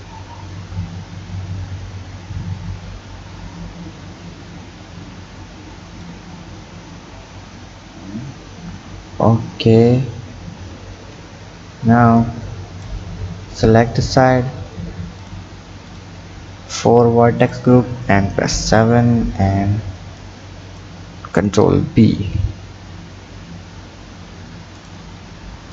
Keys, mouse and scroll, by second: 7.1 Tab, 8.1 Tab, 10.8 Tab, 11.4-12.2 scroll down 3, 12.2 click, 13.0 Tab, 15.2 click, 15.9 shift+click, 16.7 shift+click, 17.4 shift+click, 18.4 KP_7, 18.9-19.5 scroll up 7, 20.2 click, 21.1 scroll up 4, 22.1 ctrl+b.